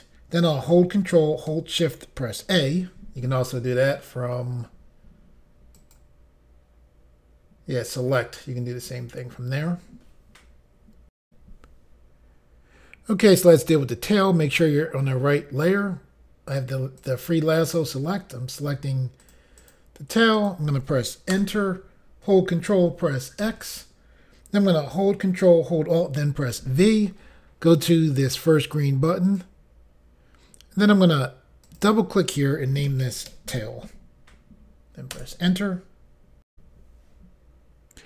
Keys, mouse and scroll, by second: 2.4 ctrl+shift+a, 5.8 click, 11.2 Insert, 16.5 click, 17.0 click, 17.6 click, 18.5 click, 19.2 click, 19.6 click, 20.3 click, 21.3 Return, 23.4 ctrl+x, 26.4 ctrl+alt+v, 29.2 click, 31.6 click, 31.8 click, 32.8 typing, 35.1 Return, 36.5 Insert.